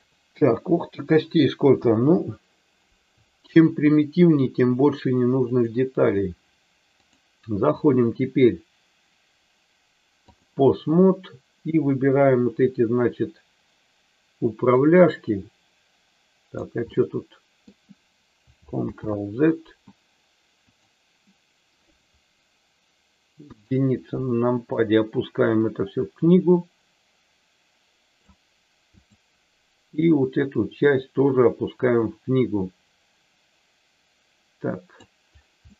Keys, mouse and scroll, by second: 1.7 KP_1, 7.1-10.3 drag, 14.8-16.5 drag, 17.0 middle click, 18.7 ctrl+click, 18.8 ctrl+z, 20.7 click, 23.3 KP_1, 24.9-28.1 drag, 28.9 click, 30.8-35.0 drag, 35.6 middle click.